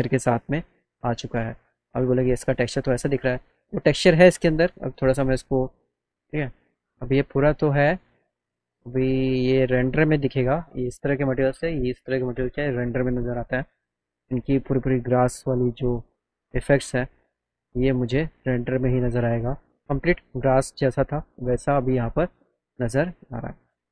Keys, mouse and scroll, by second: 0.2 alt+w, 0.9-2.1 alt+right drag, 3.7 click, 5.5 click, 6.1 middle click, 6.6 alt+middle click, 8.7 click, 9.6 click, 11.3 click, 12.5 click, 13.5 click, 14.7 alt+middle click, 16.0 click, 16.7 click, 18.5 right click, 18.8 alt+middle click, 22.4 click, 23.6 click.